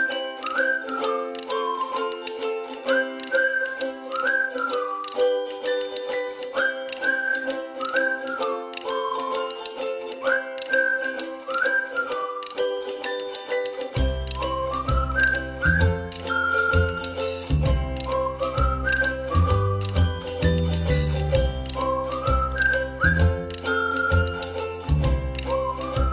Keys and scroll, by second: 8.3 ctrl+z, 10.6 space, 14.9 ctrl+c, 15.1 ctrl+f, 18.2 space, 19.5 a, 23.7 space, 24.7-25.1 ctrl+-, 25.4 ctrl+-, 26.0 ctrl+-.